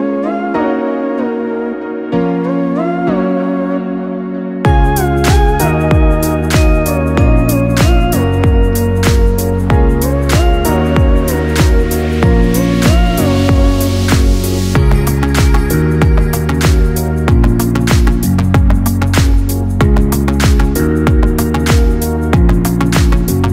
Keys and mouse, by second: 0.9-3.4 right drag, 3.4-7.5 drag, 8.2 g, 13.0 click, 13.9 g, 17.3 click, 18.4 g, 22.8 shift+click.